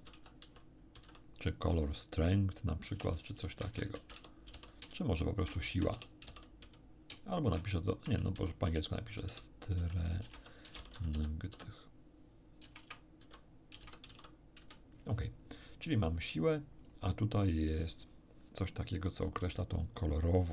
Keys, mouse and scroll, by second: 0.0-1.3 typing, 2.9-11.5 typing, 12.6-14.1 typing, 14.6 Return, 16.8 click, 17.7 click.